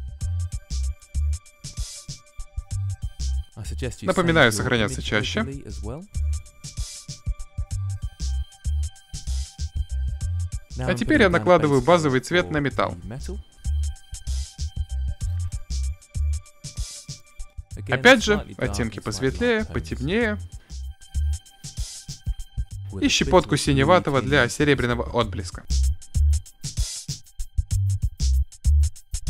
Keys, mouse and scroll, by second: 0.7 click, 0.9 shift+space, 1.3 a, 1.3 l, 1.5 l, 2.1 click, 2.5 click, 5.5 click, 6.0 click, 6.6 s, 7.0-7.3 drag, 7.6 click, 7.9 f, 8.3 middle click, 8.5-10.1 middle drag, 10.1 click, 10.9 middle click, 11.1-11.5 drag, 11.6 click, 11.7-13.0 middle drag, 13.3 click, 13.5 f, 13.6 click, 13.8-14.9 middle drag, 14.9-19.2 drag, 19.6-20.6 drag, 20.8 click, 21.1-22.5 middle drag, 22.6-23.1 drag, 23.2-25.3 drag, 25.3 middle click, 26.0 shift+space, 26.2 shift+space, 28.3 middle drag, 28.7-29.1 middle drag.